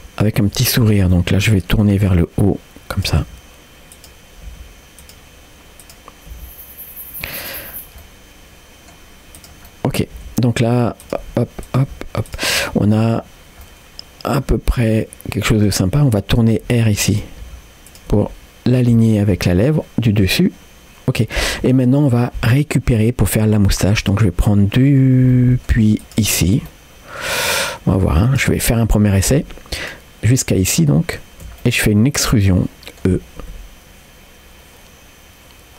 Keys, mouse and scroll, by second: 0.8 shift+click, 1.2 middle click, 1.9 r, 3.2 g, 5.8 click, 6.3 g, 7.7 scroll down 1, 8.0 middle click, 9.4 click, 9.7 middle click, 10.2 g, 11.2 r, 11.9 g, 12.6 middle click, 13.6 middle click, 14.9 click, 15.5 click, 16.0 middle click, 16.5 r, 17.5 g, 18.1 r, 19.7-21.3 middle drag, 23.3 middle click, 24.0 click, 24.8 middle click, 25.3 middle click, 26.0 shift+click, 26.7 middle click, 27.7 middle click, 28.3 shift+click, 31.6-33.1 middle drag, 31.6-32.6 scroll down 1, 33.6 e.